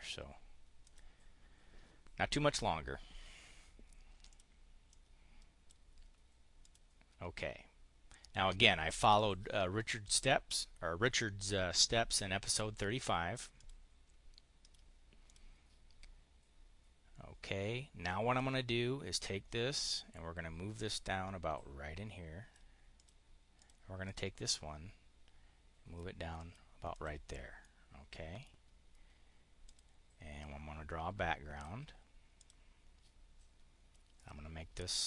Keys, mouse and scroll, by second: 0.7 click, 4.2 click, 4.7 click, 6.4 click, 8.8 click, 13.4 click, 14.4 click, 15.1 click, 18.2-22.5 drag, 22.8 click, 23.4 click, 23.9-25.9 drag, 26.2 click, 26.7 click, 27.4-28.0 scroll down 1, 29.6 click, 30.2-31.6 drag, 32.3 click, 34.1 click.